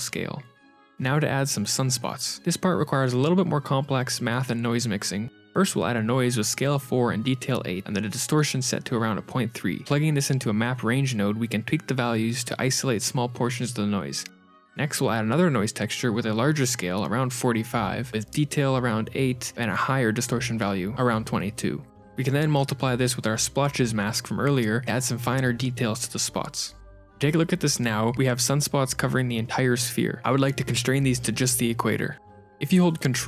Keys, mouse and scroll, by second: 0.4 click, 0.4 middle click, 0.4-1.1 scroll down 2, 0.4 x, 0.6 shift+a, 4.6 click, 7.3 middle click, 7.8 ctrl+shift+click, 8.2-8.8 scroll up 4, 8.8 click, 8.8 shift+a, 11.8 click, 14.6 middle click, 14.6 click, 14.7 shift+d, 15.9 click, 16.9 KP_4, 19.2 KP_2, 20.6 ctrl+shift+click, 22.8 ctrl+shift+click, 22.8 x, 23.7-24.0 scroll up 1, 24.0 shift+a, 28.3 middle click, 28.5 shift+a, 32.6-32.9 scroll down 5, 32.9 middle click, 33.0 middle click, 33.0 click.